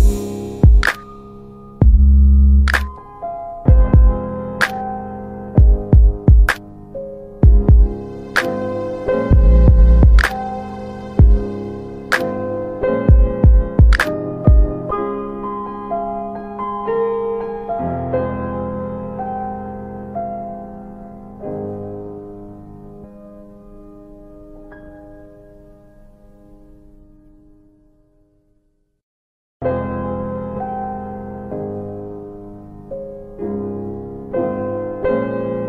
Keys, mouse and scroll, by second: 0.3 click, 2.1 alt+middle click, 3.5 click, 5.3 ctrl+a, 7.5 click, 11.3 click, 11.4 click, 13.7-15.2 typing, 17.0 click, 17.4 double click, 19.3 ctrl+alt+middle click, 21.1 middle click, 22.1 ctrl+alt+middle click, 23.5 click, 24.3 typing, 25.8 typing, 26.9 click, 28.7 click, 30.9 Delete, 33.7 click, 34.1 double click.